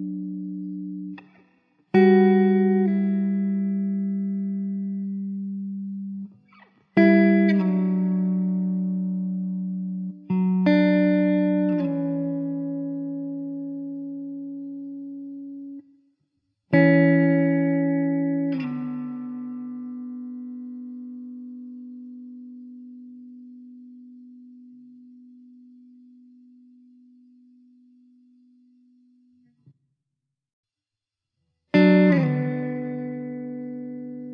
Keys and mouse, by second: 7.7 middle click, 8.3 middle click, 18.1 middle click, 22.8 middle click, 26.8 alt+w, 27.7 middle click, 30.7 middle click, 33.4 alt+w.